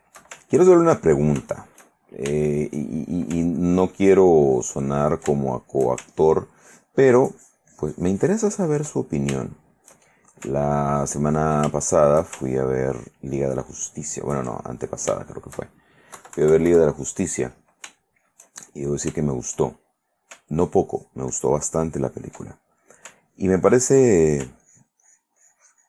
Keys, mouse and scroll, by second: 0.0-0.5 shift+middle drag, 1.2-3.4 ctrl+drag, 3.4 ctrl+shift+middle click, 3.8 ctrl+click, 5.4 ctrl+shift+click, 5.5 ctrl+shift+middle click, 6.2-7.2 ctrl+shift+drag, 7.6-9.1 ctrl+drag, 9.4-10.5 ctrl+shift+drag, 11.1 ctrl+click, 11.9 ctrl+shift+middle click, 13.1-14.7 ctrl+shift+drag, 14.8 ctrl+middle click, 15.5 ctrl+shift+middle click, 16.3 KP_Subtract, 17.2 middle click, 18.1-19.3 shift+middle drag, 19.4 shift+middle click, 20.8-22.6 ctrl+drag, 22.9 ctrl+middle click, 23.4-24.6 ctrl+drag, 24.8-25.8 ctrl+drag.